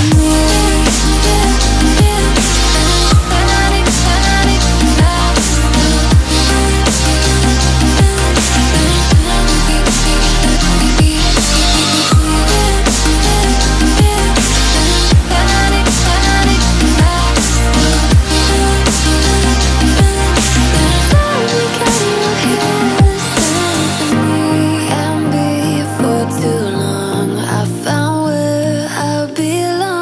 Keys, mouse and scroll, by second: 0.7 alt+scroll down 1, 1.0 click, 1.2-1.5 alt+scroll down 1, 1.5 alt+scroll up 1, 1.8 click, 2.0 alt+scroll down 1, 3.3-4.6 drag, 4.9 click, 6.1-7.2 shift+drag, 7.5-8.0 alt+scroll up 2, 8.1-10.1 shift+drag, 10.1 alt+scroll down 1, 10.9-14.5 drag, 15.7 click, 17.8-18.3 alt+scroll up 1, 18.6 click, 24.8-28.7 drag, 28.7-30.0 drag.